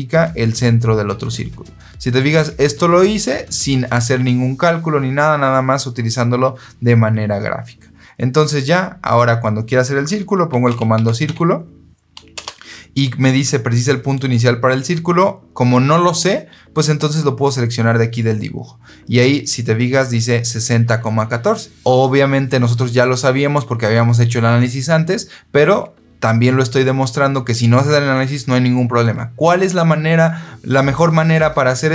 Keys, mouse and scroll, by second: 10.2-11.6 typing, 12.2 Return.